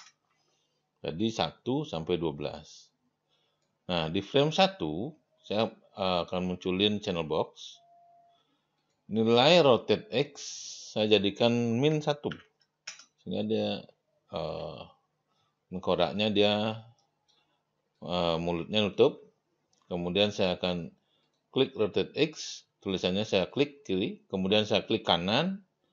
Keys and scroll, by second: 11.9 KP_Subtract, 12.3 1, 12.8 Return.